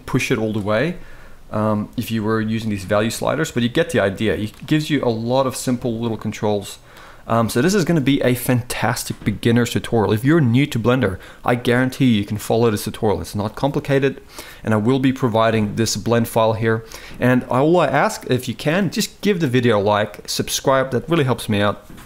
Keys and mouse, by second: 2.5-4.2 drag, 5.7 click, 7.3 shift+middle click, 16.0-16.5 shift+middle drag.